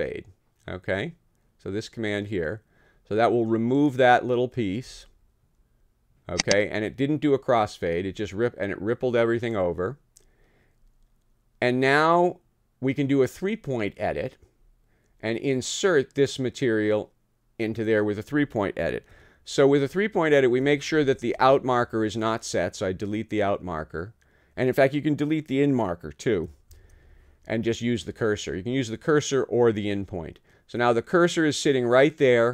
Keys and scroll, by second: 20.9 super+], 26.7 super+[.